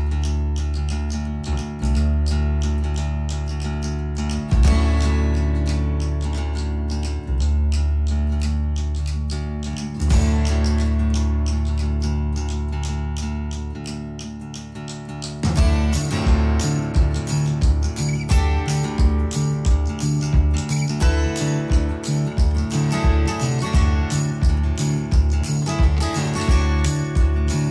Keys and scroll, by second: 5.4 s, 6.0 space, 7.5 p, 10.4-11.4 typing, 14.4-16.1 typing, 19.2-21.1 typing, 22.8-24.0 typing, 24.2 Escape, 27.4 o.